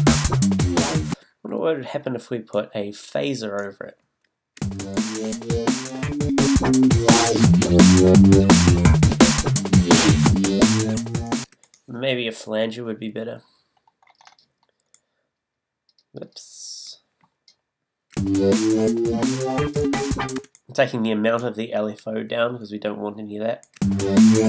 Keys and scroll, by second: 4.6 space, 11.4 space, 13.3 BackSpace, 18.1 space, 20.3 space, 23.8 space.